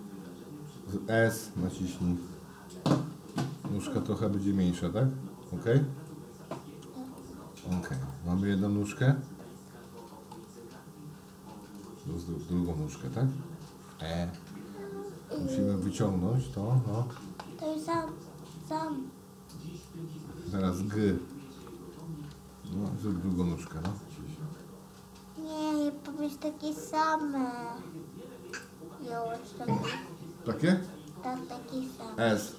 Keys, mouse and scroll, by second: 4.3 s, 8.1-10.3 middle drag, 11.7 click, 12.6 click, 16.5 e, 22.5 g.